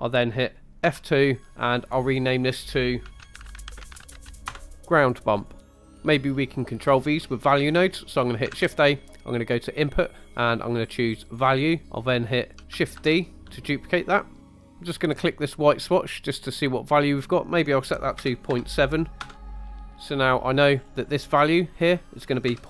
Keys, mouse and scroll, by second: 0.8 F2, 5.6-6.0 scroll up 3, 5.8 middle click, 7.6 middle click, 8.5 shift+a, 12.5 click, 13.0 shift+d, 14.4 scroll up 2, 14.7 middle click, 15.6 click, 19.8-20.3 scroll down 4, 20.3 middle click, 20.8 scroll up 2, 21.6-22.6 drag.